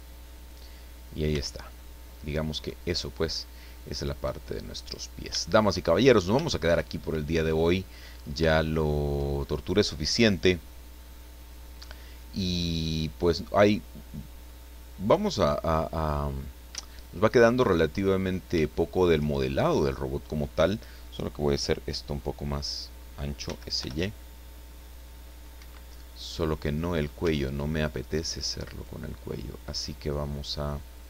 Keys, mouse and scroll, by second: 0.8-1.1 scroll down 1, 1.3 Tab, 1.6-2.2 scroll down 1, 2.2-4.6 middle drag, 4.7-5.0 scroll down 1, 5.4 shift+middle click, 6.1 scroll up 1, 6.5 shift+middle click, 7.2 middle click, 7.7 scroll down 2, 8.1-8.5 scroll up 3, 8.5 shift+middle click, 9.3-9.6 shift+scroll down 2, 10.4 click, 11.7 click, 12.4-12.7 scroll down 1, 12.8-16.0 middle drag, 16.3-16.8 scroll up 1, 16.8 shift+middle click, 17.6 shift+middle click, 18.3 scroll up 3, 18.7 shift+middle click, 19.5 shift+right click, 23.4 s, 23.8 y, 25.5 Escape, 25.9-27.2 middle drag, 27.2 Tab, 27.5-27.9 scroll up 1, 28.6 right click.